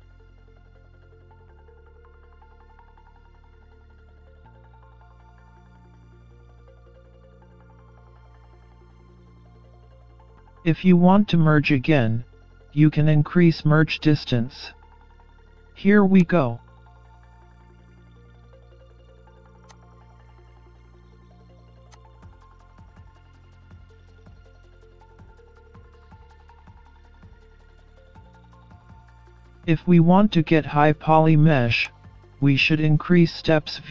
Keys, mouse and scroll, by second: 1.1-1.5 scroll up 6, 1.8 middle click, 4.2-4.8 scroll down 2, 4.8 scroll up 2, 5.3 middle click, 9.5 middle click, 16.2 click, 17.7-18.3 scroll down 12, 18.3-19.0 scroll up 9, 19.8 click, 20.1 scroll up 4, 20.5 middle click, 21.9 click, 22.1-22.8 scroll down 13, 22.8 middle click, 23.5 scroll down 3, 23.6-24.2 scroll up 4, 24.3 Tab, 24.5 middle click, 28.6 middle click, 29.0 middle click, 31.9 click.